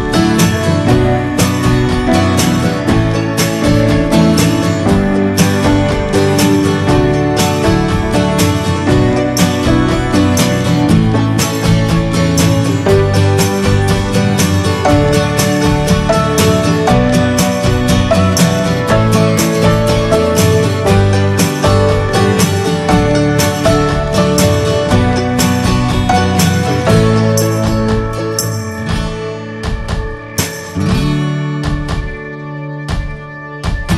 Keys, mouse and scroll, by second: 2.7-4.0 right drag, 4.0-11.3 drag, 12.2-13.2 middle drag, 13.2-14.7 drag, 14.9-15.9 shift+middle drag, 15.9 click, 16.8 middle click, 17.7-18.8 drag, 18.8-19.4 scroll down 4, 19.0 middle click, 19.4 shift+middle click, 19.9 scroll down 1, 20.1-22.0 shift+middle drag, 22.0 b, 22.4 middle click, 22.8-23.2 scroll up 2, 23.1 shift+middle click, 24.0 scroll up 2, 24.7 shift+middle click, 24.8 shift+scroll up 1, 25.6 scroll up 2, 30.4 scroll up 1, 30.8-32.8 shift+middle drag, 32.8 click, 33.2-33.5 scroll down 3, 33.5 middle click.